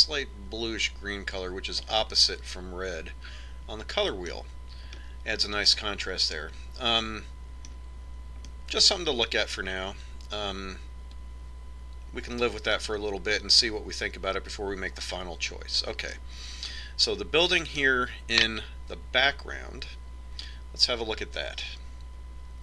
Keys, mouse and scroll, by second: 2.6-4.4 middle drag, 5.6-8.1 middle drag, 9.1-11.0 middle drag, 18.4-21.3 right drag.